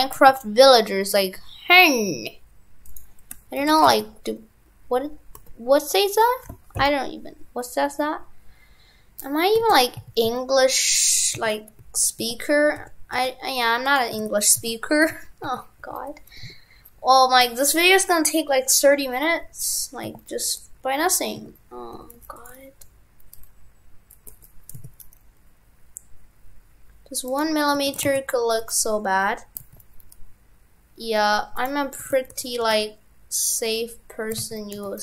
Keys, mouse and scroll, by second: 3.6 shift+f, 9.6 shift+f, 14.2 shift+f, 27.9 shift+f, 32.1 shift+f.